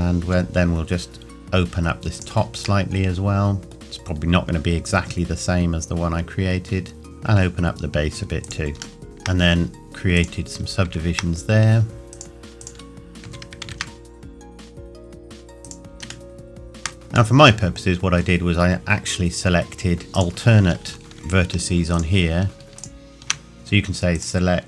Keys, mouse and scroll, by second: 0.2 s, 2.2 click, 2.8 middle click, 3.8 g, 7.0 click, 7.3 s, 8.4 click, 9.0 middle click, 9.7 scroll up 1, 9.8 click, 11.5-12.1 scroll up 1, 13.2 s, 13.6 shift+z, 15.6 click, 16.3 shift+middle click, 20.2 alt+click, 21.1 Tab, 21.9 alt+click, 24.1 click.